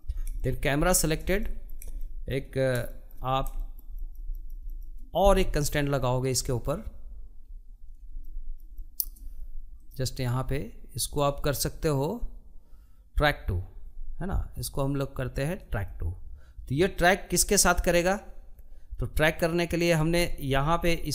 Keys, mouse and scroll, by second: 2.0 scroll up 1, 2.3-14.5 shift+middle drag, 16.7-18.8 shift+middle drag, 18.8-20.0 scroll up 9, 20.0 shift+middle click, 20.9-21.1 scroll up 4.